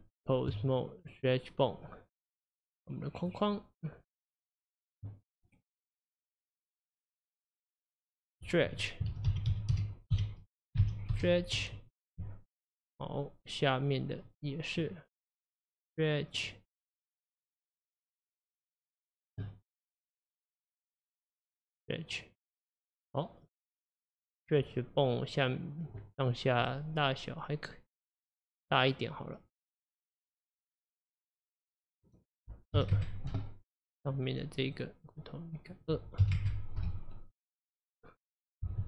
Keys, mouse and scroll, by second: 1.1 click, 2.4 click, 4.9 click, 6.5 click, 8.0 click, 8.2-11.2 drag, 14.3 click, 15.6 click, 17.9 click, 19.3 click, 20.6 click, 22.8-25.8 middle drag, 26.7-29.7 middle drag, 29.9-34.8 drag, 35.7-38.7 drag.